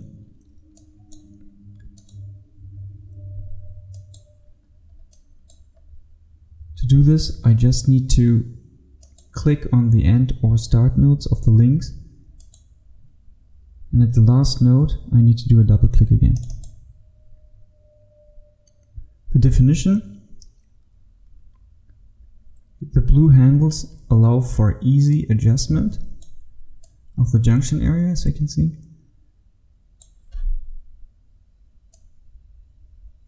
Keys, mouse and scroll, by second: 0.8 click, 2.1 right click, 4.0 click, 4.8-5.2 scroll up 1, 5.2 click, 5.8 scroll up 1, 9.0 click, 19.4-25.2 scroll up 1, 25.2 click.